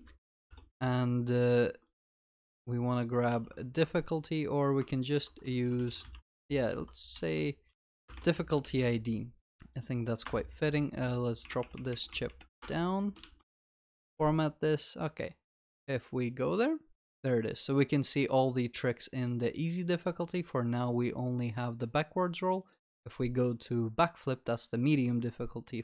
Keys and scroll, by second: 2.1 ctrl+w, 4.8 ctrl+v, 5.1 ctrl+w, 7.1 ctrl+w, 8.5 ctrl+v, 10.2 ctrl+s, 13.3 ctrl+alt+l, 13.7 ctrl+s.